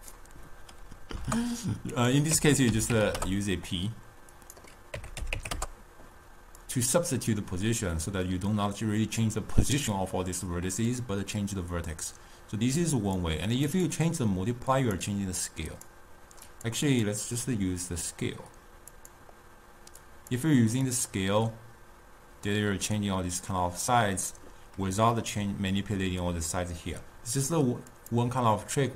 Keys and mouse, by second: 11.1-14.1 drag, 14.9-16.7 drag, 17.1-20.6 drag, 21.2-24.3 drag, 28.0 click, 28.7-28.9 middle drag.